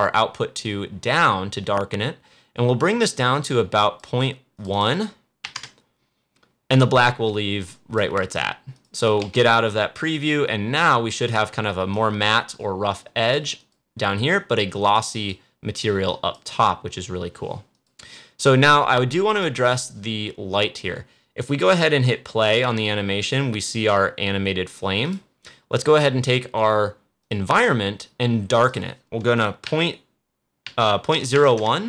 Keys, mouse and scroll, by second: 0.6-4.5 drag, 7.7 click, 9.2 c, 10.8-13.5 drag, 14.6 scroll down 1, 15.1 click, 19.9 scroll up 1, 22.4 click, 25.0 click.